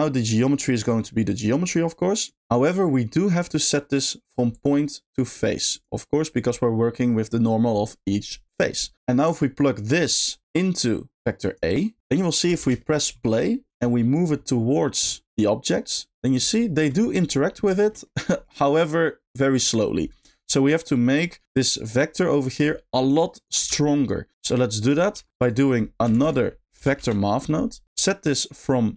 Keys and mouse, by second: 0.9 click, 1.1-2.3 drag, 2.4 ctrl+z, 2.4 click, 4.5 click, 5.8-6.4 drag, 8.9 middle click, 10.0 click, 10.3-11.6 drag, 12.5 space, 12.8 shift+middle click, 13.7 g, 16.2 click, 16.7 shift+middle click, 17.1 middle click, 17.8 shift+middle click, 20.3 shift+middle drag, 21.0 middle click, 22.7 middle click, 23.6 space, 24.0 middle click, 24.6 click, 25.1 g, 25.4 click, 25.8 middle click, 26.1 shift+a, 28.4 middle click.